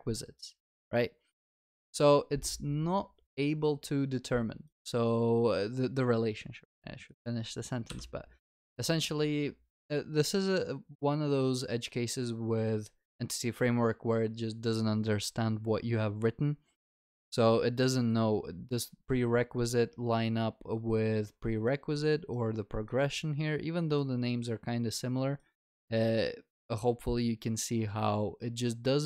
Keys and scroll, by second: 7.9 ctrl+b.